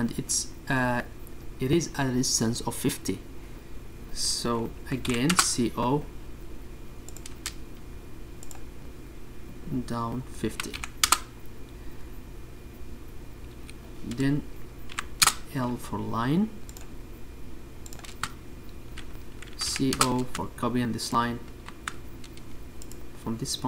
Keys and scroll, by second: 8.0 c, 8.3 Return, 10.3 space, 16.8 Escape, 18.4 l, 18.6 Return, 21.5 space, 22.8-23.6 typing.